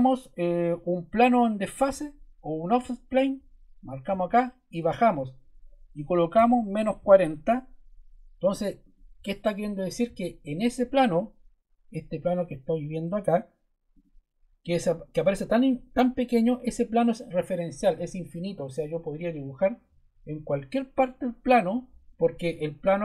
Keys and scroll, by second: 6.0-7.4 typing.